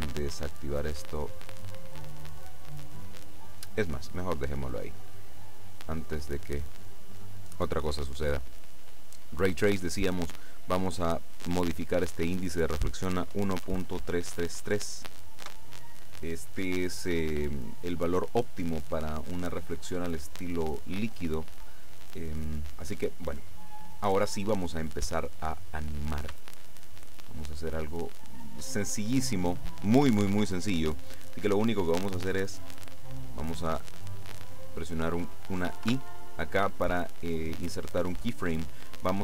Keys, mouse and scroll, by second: 3.6 click, 5.0 click, 11.1 click, 11.9 click, 12.9 click, 13.4 KP_1, 13.7 KP_Decimal, 14.0 KP_3, 15.5 KP_Enter, 26.6 shift+scroll down 2, 26.6 shift+middle click, 36.0 i.